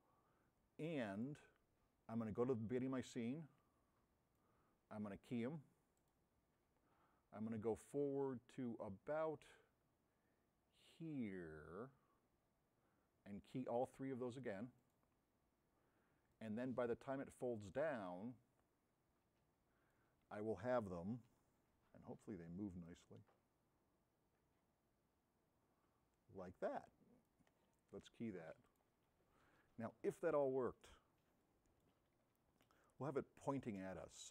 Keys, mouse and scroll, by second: 21.5 b, 22.9 v, 28.7 v, 31.0 scroll down 2, 31.5-32.0 right drag, 31.5 a, 32.3 scroll up 2, 33.0-33.6 right drag, 33.0 a.